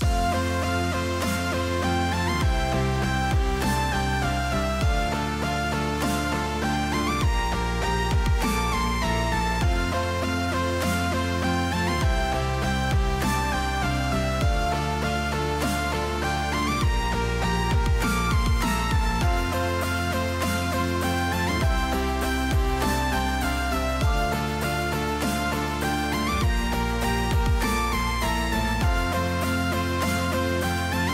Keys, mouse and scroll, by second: 0.8 Tab, 1.8 middle click, 3.0 middle click, 6.1 shift+middle click, 9.7 Tab, 10.3 click, 11.0 s, 15.6 shift+middle click, 16.8 shift+middle click, 17.1 shift+middle click, 18.1 shift+middle click, 18.6 ctrl+z, 18.9 ctrl+z, 19.6 middle click, 20.4 s, 24.4 shift+middle click, 25.0 g, 26.1 shift+middle click, 26.4 click.